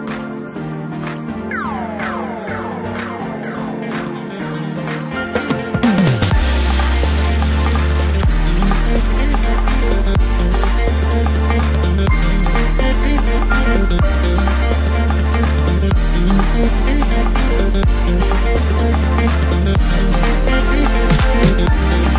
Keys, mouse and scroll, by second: 1.5 g, 4.2 s, 6.8 shift+b, 10.1 s, 14.8 s, 19.3-21.1 drag, 21.1-22.1 middle drag.